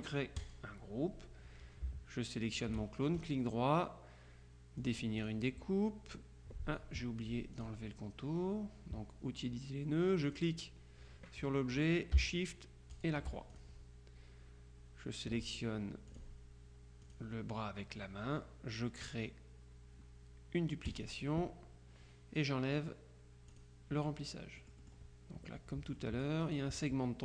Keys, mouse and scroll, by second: 0.4 click, 2.5 shift+click, 4.9 click, 7.6 click, 10.3 click, 13.2 shift+click, 16.2 click, 17.1 click, 21.0 click, 23.6 click, 24.6 click, 26.0-27.1 drag.